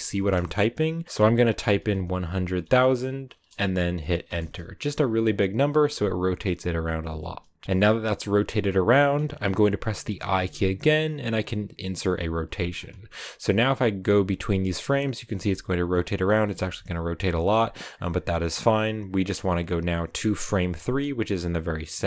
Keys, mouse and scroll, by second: 8.5-12.4 drag, 14.5-16.8 drag, 20.6-22.0 drag.